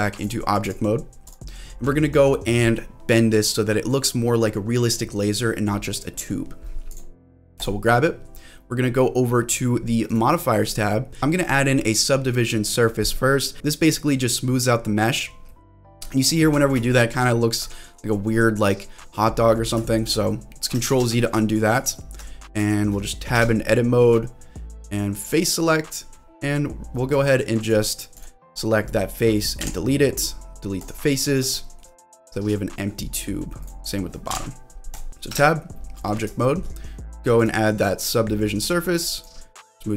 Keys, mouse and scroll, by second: 0.6 click, 1.2 click, 1.9 scroll down 1, 2.0-2.8 scroll up 3, 6.9 click, 7.6-10.2 drag, 11.2 ctrl+z, 11.2-13.5 drag, 15.5 middle click, 16.1 shift+middle click, 16.9 shift+middle click, 17.4-17.7 scroll up 2, 17.7 shift+middle click, 18.1-19.2 middle drag, 19.3-19.8 scroll down 3, 19.8 shift+middle click, 20.3 middle click, 21.0 ctrl+z, 21.2 shift+middle click, 21.5-21.9 scroll up 2, 21.9 shift+middle click, 22.3 scroll up 1, 22.8 shift+middle click, 23.3 Tab, 23.6-25.0 scroll up 1, 25.0 scroll up 1, 25.2 click, 27.6 click, 28.1 click, 28.6 middle click, 29.6 Delete, 31.4 shift+middle click, 32.0 middle click, 32.6 middle click, 33.0-33.6 scroll down 1, 33.6 click, 33.6 scroll down 1, 34.7 Delete, 35.1 shift+middle click, 35.3 Tab, 35.7 click, 35.7 middle click, 36.4 shift+middle click, 37.4-39.2 drag, 39.6-39.9 scroll up 3.